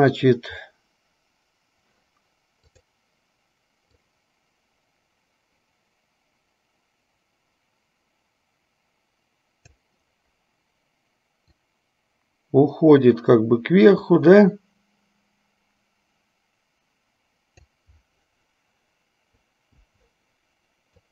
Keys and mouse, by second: 3.0 click, 4.3-10.1 drag, 11.7-18.1 drag, 19.8 i.